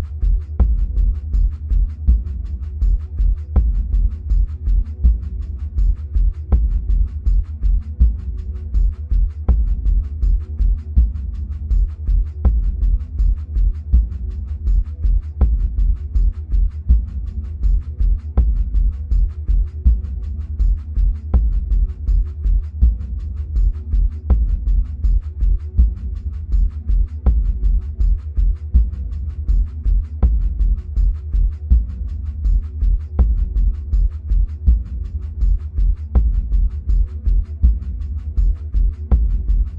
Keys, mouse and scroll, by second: 0.0 click, 3.9-7.9 middle drag, 8.1-15.3 middle drag, 8.1-8.9 scroll up 2, 15.3-16.2 scroll down 2, 16.2-24.5 middle drag, 24.5-39.7 drag.